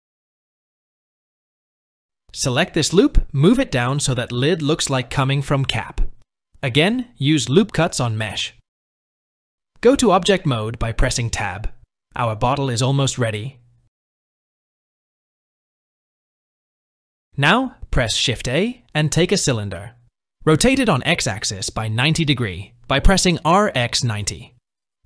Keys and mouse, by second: 3.4 s, 3.4 g, 6.8 ctrl+r, 10.0 Tab, 10.4 KP_1, 11.8 click, 17.0 shift+a, 22.1 r, 24.1 KP_3.